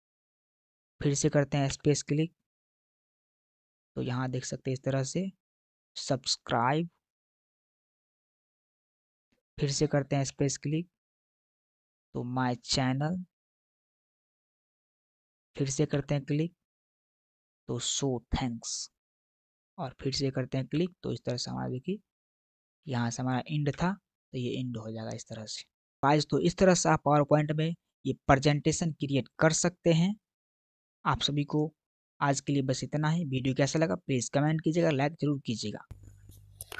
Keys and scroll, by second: 1.6 space, 10.1 space, 15.8 space, 20.6 space, 23.7 Return.